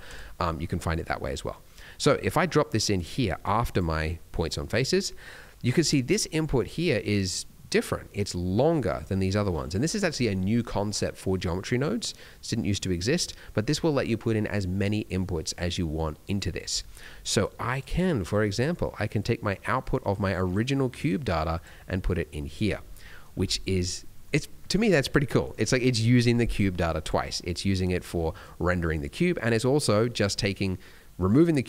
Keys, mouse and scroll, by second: 3.4 click, 17.2 click, 18.5 click, 22.4 click, 22.9 middle click, 23.3 alt+a, 24.0 middle click, 24.3-25.0 scroll up 2, 25.2 middle click, 26.5 click, 29.7 click.